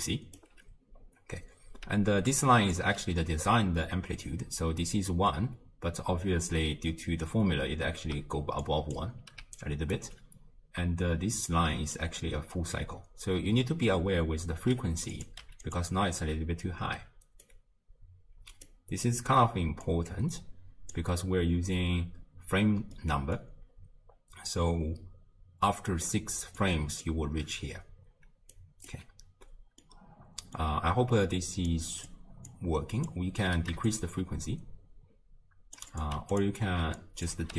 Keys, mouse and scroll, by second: 0.4 d, 0.5 d, 1.9 d, 2.3-2.8 drag, 2.8 d, 8.1 d, 8.6-9.0 drag, 9.0 d, 9.4 d, 9.6 right click, 10.0 d, 11.1 d, 11.5-12.0 drag, 12.0 d, 12.1 d, 15.1 click, 17.0 d, 17.4-18.7 right drag, 18.7 d, 18.8 d, 19.9 click, 23.0-26.0 middle drag, 26.2-29.1 typing, 26.6-27.1 drag, 28.5 right click, 29.8-31.7 middle drag, 31.7 click, 32.5 click, 33.9-36.4 shift+drag, 37.0 drag.